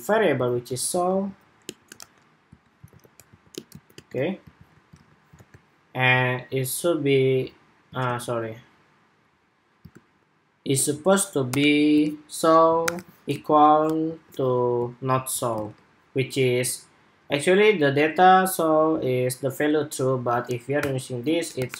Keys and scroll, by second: 4.3 super+s, 4.7 super+Tab, 5.1 super+r, 7.6 super+Tab, 9.9 shift+super+2, 14.9 super+s, 15.4 super+Tab.